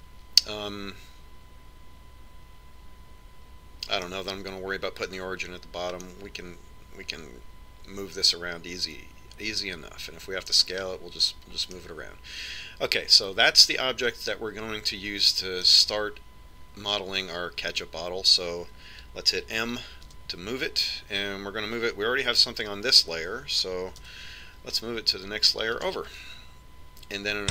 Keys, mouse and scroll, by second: 1.0-2.8 middle drag, 7.5-9.6 middle drag, 12.3-13.3 scroll down 1, 13.3-15.2 middle drag, 21.7 m, 25.7 m.